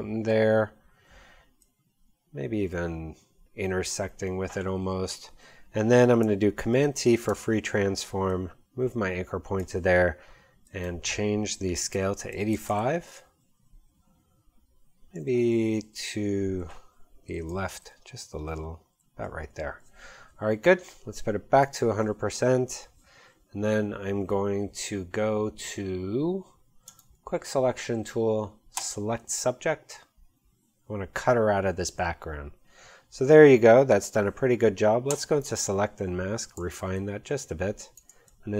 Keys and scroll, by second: 4.7 Up, 6.7 super+t, 11.5-12.4 typing, 12.5 Return, 17.6 shift+Left, 18.9 shift+Right, 36.5 space.